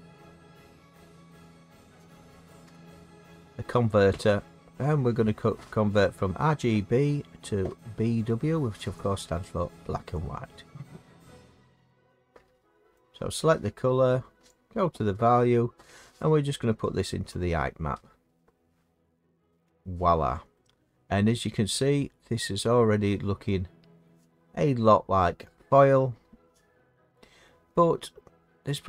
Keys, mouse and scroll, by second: 8.9 click, 10.2 click, 12.9 click, 17.2 click, 24.0 middle click, 27.7 middle click, 27.8 middle click.